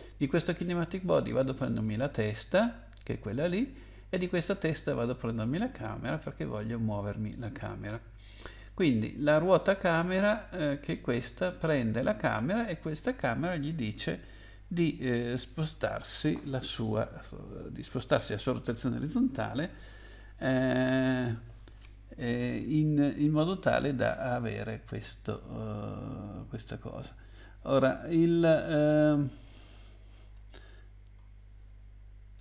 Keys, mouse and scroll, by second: 1.8 click, 4.6 click, 7.3 click, 9.5 click, 9.7 click, 9.8 double click, 27.1-28.3 scroll down 1, 30.8-31.5 scroll down 1.